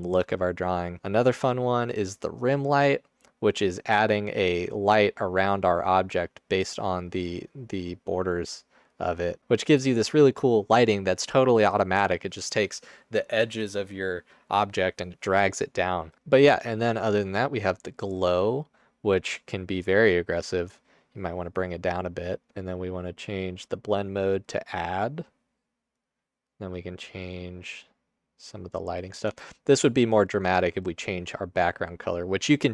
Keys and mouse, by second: 2.2-2.9 drag, 5.4-7.5 drag, 16.2 ctrl+z, 29.4 Tab.